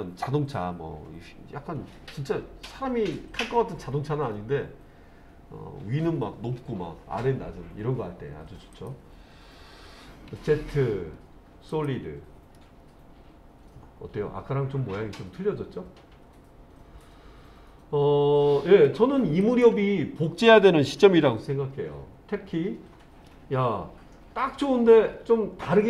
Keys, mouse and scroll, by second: 8.8 click, 10.4 z, 12.6-18.9 middle drag, 19.5 click, 22.4 Tab, 23.3-25.8 middle drag.